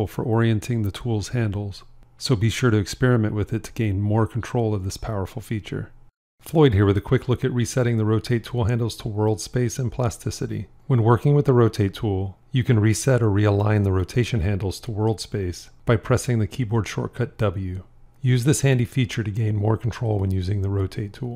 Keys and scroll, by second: 1.4 r, 2.1 v, 11.0 r, 16.5 w.